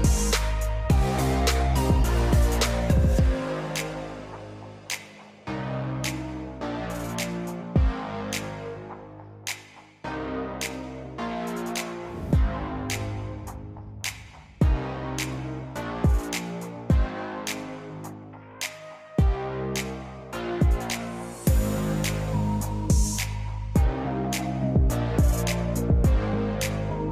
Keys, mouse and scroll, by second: 1.6 click, 2.1 g, 3.0 click, 3.3 g, 4.6 click, 4.8 f, 5.1 click, 5.6 scroll down 1, 5.8-6.2 scroll up 3, 6.2 g, 7.7 click, 8.2 g, 9.0 click, 9.1 g, 9.6 Tab, 10.0 scroll down 3, 10.2 right click, 10.8 Tab, 11.0 click, 11.3 Tab, 11.4-11.9 right drag, 11.9-12.2 scroll up 3, 12.2-12.6 scroll down 2, 12.6 click, 13.8 click, 14.5 click, 15.7 click, 16.9-22.1 drag, 22.5 click.